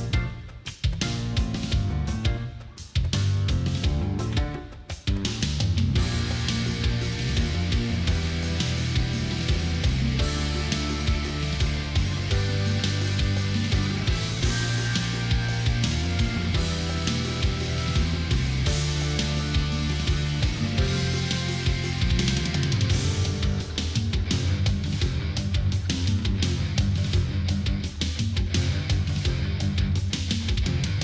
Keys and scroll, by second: 2.2 Delete, 2.7 Delete, 29.2 ctrl+-, 30.6 ctrl+0.